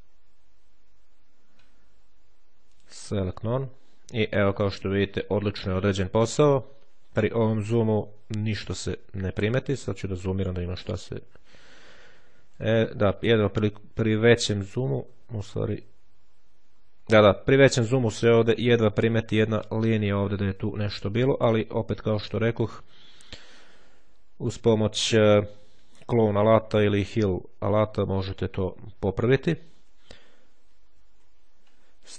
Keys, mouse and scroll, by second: 2.6 click, 10.1-11.1 ctrl+scroll up 1, 11.4-11.9 ctrl+scroll up 1, 13.7-15.3 shift+scroll up 1, 15.3-16.0 shift+scroll down 1, 16.7-17.3 shift+scroll down 1, 18.3-28.7 scroll up 1, 28.7-29.4 ctrl+scroll up 1, 29.4 ctrl+z, 29.4-30.3 ctrl+scroll up 1, 30.3-31.8 ctrl+scroll up 1, 30.9 ctrl+z, 31.8-32.1 ctrl+scroll up 2.